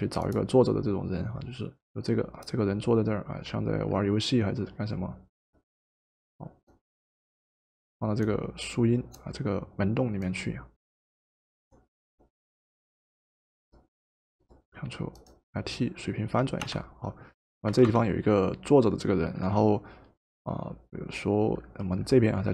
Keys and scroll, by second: 16.6 Return, 17.7 v.